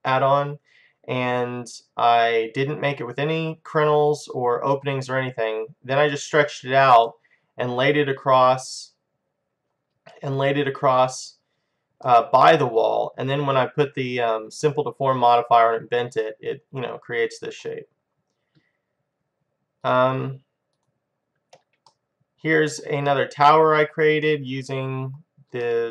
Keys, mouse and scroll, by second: 5.5-7.1 scroll down 1, 7.1-9.1 middle drag, 12.1-13.9 middle drag, 16.2-18.0 middle drag, 19.9-22.5 drag, 22.2-23.3 middle drag, 24.8-25.9 middle drag.